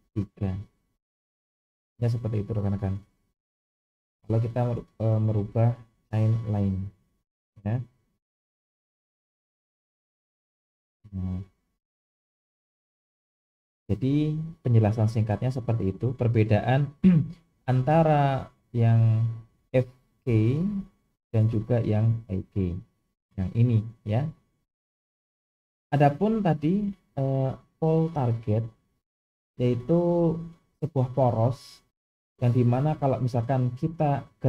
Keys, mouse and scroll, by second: 1.4 alt+g, 3.6 click, 8.2 click, 9.2 click, 10.3 click, 13.3 click, 14.6 g, 20.6 click, 22.0 click, 26.6 click, 33.7 click.